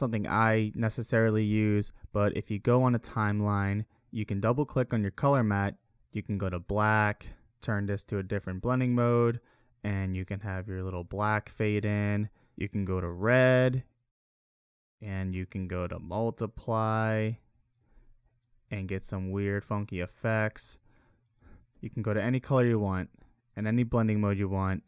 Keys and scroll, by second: 9.8 space, 11.6 space, 19.0 space, 20.5 space.